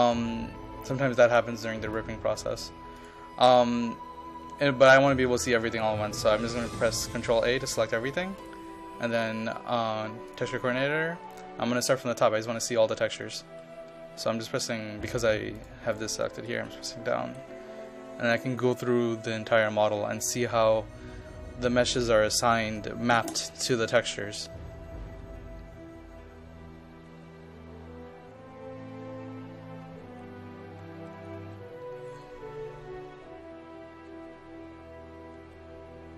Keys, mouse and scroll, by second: 7.3 ctrl+a, 8.4 click, 17.2 Down.